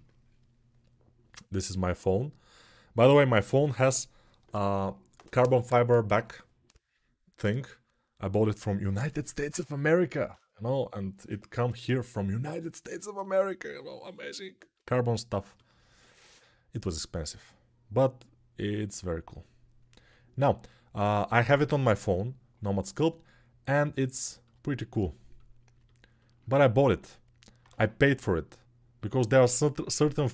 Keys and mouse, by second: 17.7 click, 17.8-18.8 middle drag, 18.8-30.3 drag.